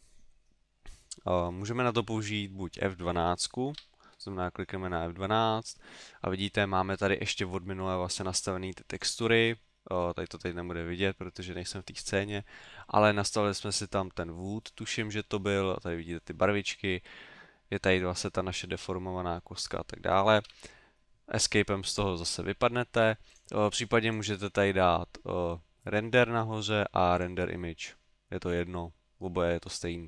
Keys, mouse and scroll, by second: 20.5 Escape, 23.3 click, 24.1 click.